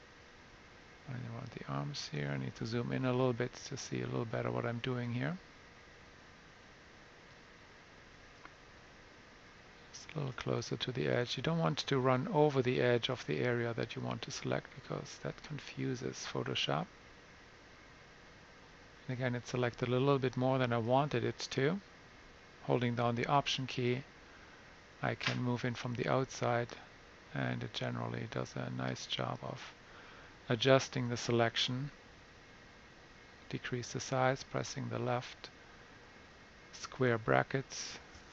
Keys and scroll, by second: 2.9 super+=, 3.0 super+=, 3.2 super+=, 3.6 super+=, 32.8 [, 33.3 [, 33.4 [.